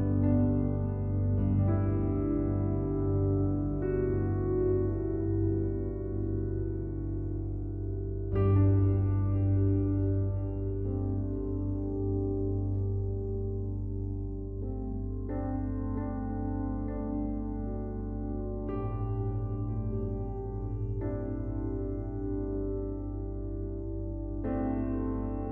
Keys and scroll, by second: 8.0 ctrl+t.